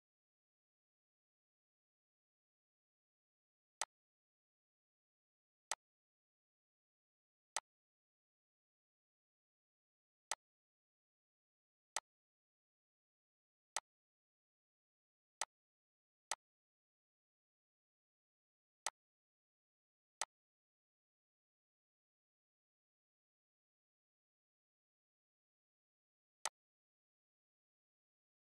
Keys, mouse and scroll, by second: 3.8-5.6 drag, 10.3 click, 18.8 click, 24.2 right click, 26.7 typing.